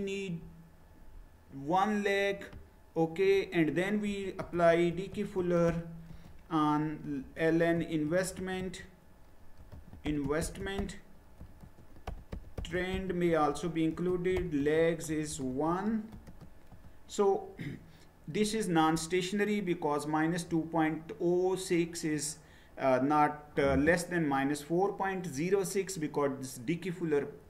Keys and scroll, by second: 3.8-16.2 typing, 16.7 Return.